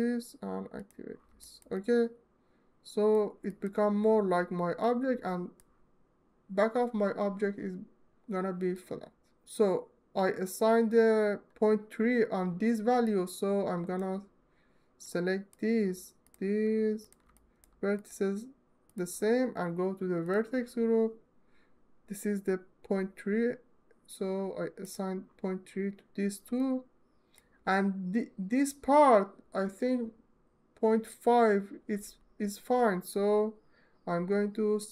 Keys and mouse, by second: 0.4 click, 1.2 alt+shift+click, 1.6 alt+click, 2.1 alt+middle click, 4.8 alt+click, 5.0 alt+click, 8.6 alt+middle click, 13.1 alt+click, 13.4 alt+click, 13.6 alt+click, 14.7 click, 17.0 alt+middle click, 24.6-26.1 middle drag, 26.4 alt+middle click.